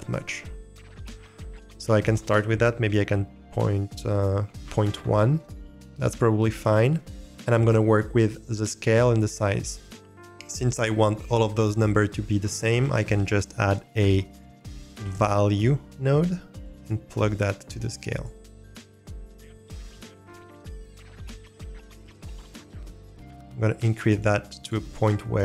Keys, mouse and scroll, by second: 1.5-4.9 drag, 5.8 middle click, 8.4 middle click, 10.0 click, 10.0 shift+a, 13.9 shift+a, 17.3-18.2 drag, 20.0 click, 21.5 click, 21.9 click, 22.3 click, 22.7 click, 24.1 click, 24.6 click, 25.3 middle click.